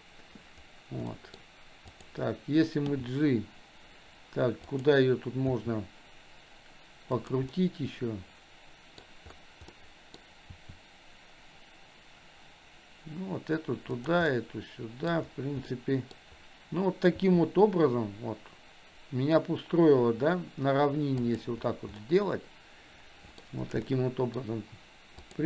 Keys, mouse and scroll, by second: 1.2 middle click, 2.8 g, 5.5 r, 7.6-9.1 middle drag, 9.8-10.8 middle drag, 10.8 r, 14.4-15.3 middle drag, 15.9 middle click, 17.2 r, 22.2-24.6 middle drag, 25.2 click.